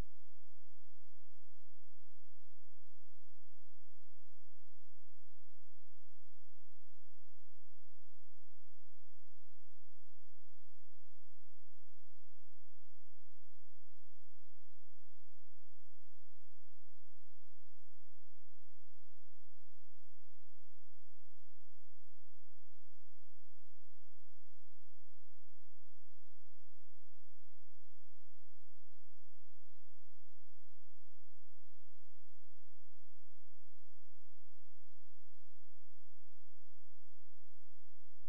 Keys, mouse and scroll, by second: 5.0 Escape, 5.5 click, 8.0 space, 8.3 click, 14.8 Delete, 16.3 click, 23.4-24.7 scroll up 1, 24.7 click, 37.7-38.2 scroll down 1.